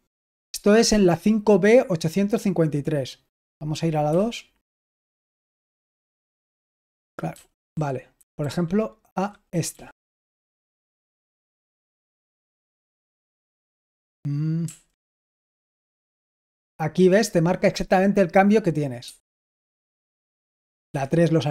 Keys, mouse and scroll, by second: 4.0 typing, 7.2-9.6 typing, 10.3 Return, 14.6 typing, 15.8 j, 19.0 Escape, 20.8 typing.